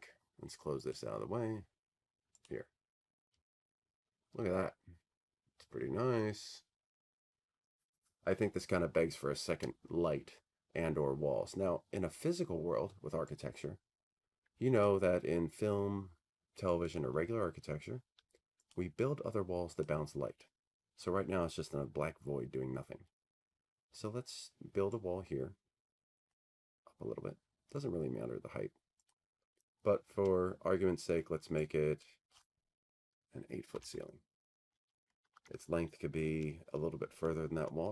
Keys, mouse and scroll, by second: 0.3 click, 3.2 click, 4.8 click, 6.5 click, 8.1 click, 19.0 click, 20.4 click, 22.5 click, 24.2-27.6 drag, 31.8-34.1 drag, 34.7 click, 37.6 click.